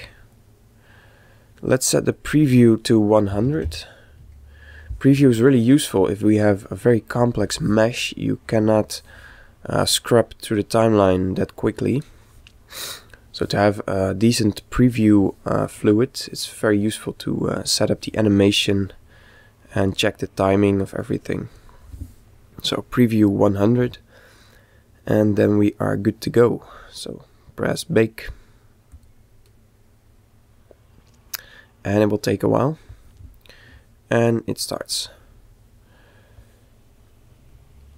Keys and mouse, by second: 2.0 click, 8.3-9.8 middle drag, 9.8 click, 16.0-18.1 middle drag, 18.8-20.7 drag, 28.5-31.2 drag.